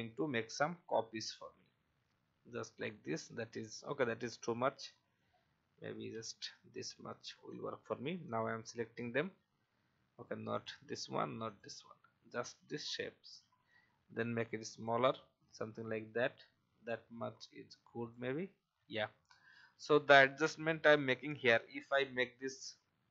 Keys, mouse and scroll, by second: 4.5-5.8 drag, 5.9 Delete, 7.4-8.8 drag, 10.5 shift+click, 11.5 shift+click, 13.7 shift+click, 15.6 alt+scroll down 1, 16.2-17.2 scroll up 1, 17.4 shift+click, 20.4-21.1 alt+scroll up 1, 21.2-21.5 alt+scroll down 1.